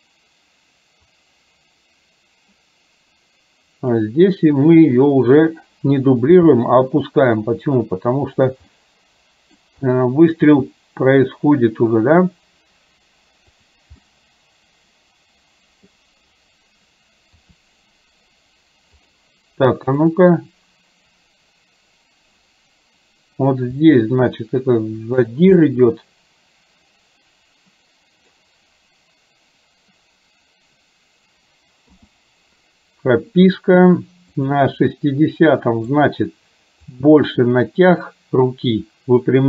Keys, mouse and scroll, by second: 6.5 g, 8.6-9.6 middle drag, 10.0 middle click, 10.5 g, 14.1-16.0 middle drag, 17.5 r, 20.1 click, 23.8 r, 25.6-28.4 middle drag, 34.5 click, 35.6 middle click, 37.0-39.4 drag.